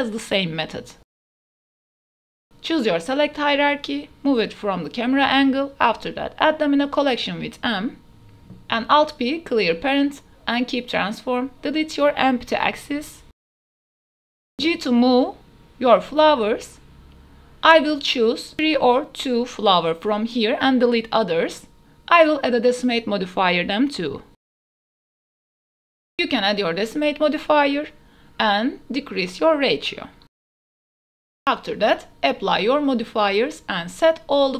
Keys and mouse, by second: 0.3-0.6 drag, 1.1-2.0 drag, 2.4 click, 2.8-5.4 typing, 5.0 drag, 7.4 Return, 8.0-8.4 drag, 9.2 alt+p, 13.0 Delete, 14.1-18.0 typing, 14.6 click, 15.0 click, 15.3 click, 15.6 click, 16.4 click, 16.7 click, 17.3 click, 17.6 click, 19.1 click, 19.6 g, 21.5-22.4 drag, 22.2 g, 22.8 click, 24.3 ctrl+shift+s, 24.7 shift+drag, 25.2 click, 26.0 click, 26.9 drag, 27.4-28.5 drag, 30.7-34.2 drag, 34.4 ctrl+a.